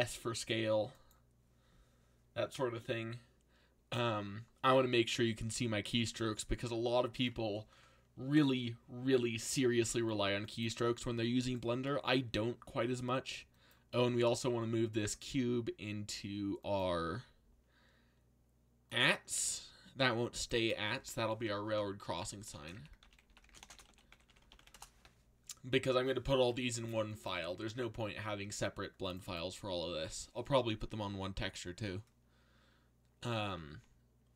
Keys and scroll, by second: 0.0 s, 9.0 z, 22.3-25.1 typing.